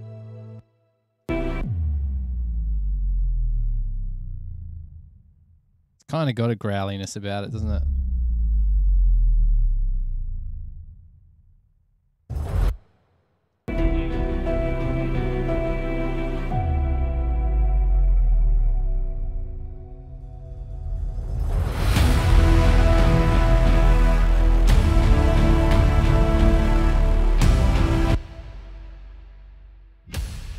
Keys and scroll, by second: 0.8 space, 1.5 space, 1.8 s, 6.0 space, 7.3 space, 12.9 space, 13.8 space, 21.3 super+=.